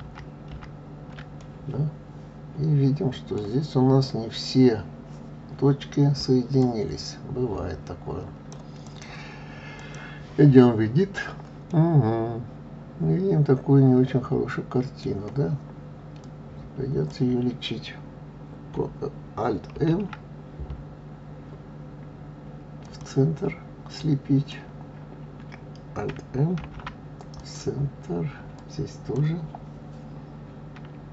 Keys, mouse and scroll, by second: 0.0 ctrl+z, 1.4-3.7 middle drag, 3.7 scroll up 2, 6.6-11.7 drag, 11.7-14.7 middle drag, 16.2 click, 23.9 click, 26.6 alt+m, 28.5 click.